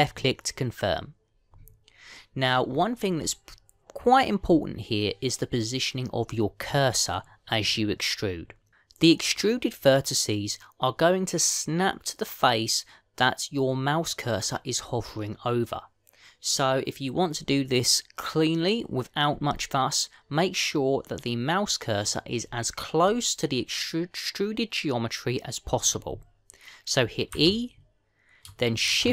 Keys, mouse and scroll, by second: 3.5-5.5 scroll up 3, 5.5-7.1 scroll up 2, 28.1 e.